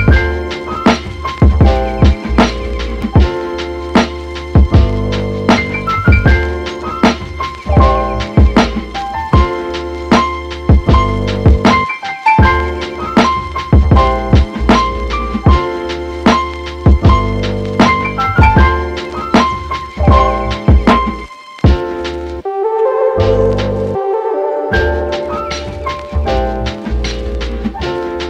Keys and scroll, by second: 0.5 super+d.